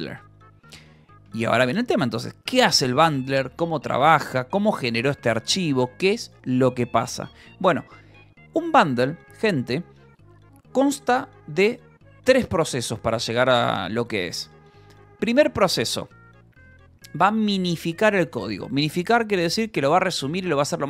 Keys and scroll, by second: 15.0 ctrl+h, 15.5-16.6 typing.